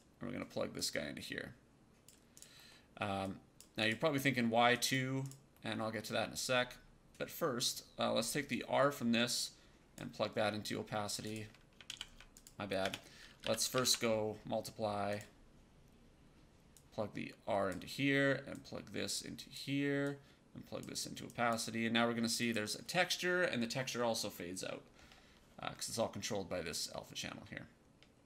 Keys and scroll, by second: 11.8 ctrl+z, 12.7-14.2 typing.